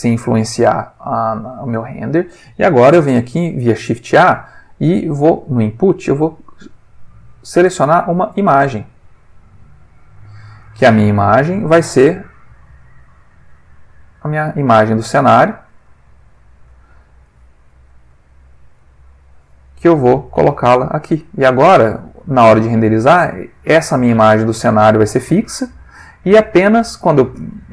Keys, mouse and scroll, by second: 0.2-1.0 drag, 1.3 click, 3.5 shift+a, 9.4 click, 10.4 click, 10.8-12.0 ctrl+middle drag, 12.4 click, 13.6 click, 14.2 click, 15.0-16.3 middle drag, 16.4 ctrl+middle click, 17.3-18.9 drag, 17.9-18.9 ctrl+middle drag, 19.3-20.6 drag, 20.9 middle click, 22.1 click, 23.2-26.1 drag.